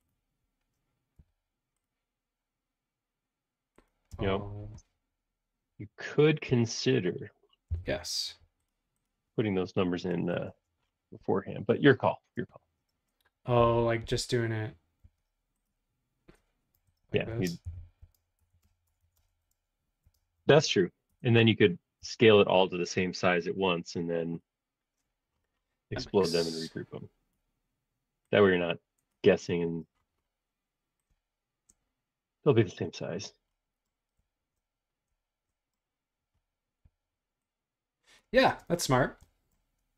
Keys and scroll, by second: 1.2 s, 4.1 space, 6.5 q, 7.7 Left, 8.2 Right, 10.5 space, 13.6 super+z, 14.0 super+z, 15.0 super+z, 16.8 super+a, 17.2-18.5 typing, 19.9-20.6 typing, 21.1 Return, 22.1 BackSpace, 26.1 s, 29.6 super+z, 32.9 space, 36.8 s, 38.3 space.